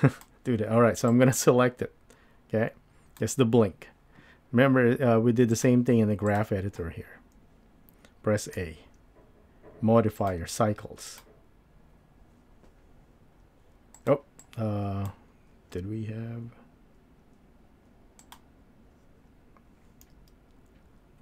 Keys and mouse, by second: 1.1-3.2 drag, 5.7 click, 8.6 a, 10.2-13.6 drag, 13.9 click, 14.4 click, 18.3 click, 20.0 n.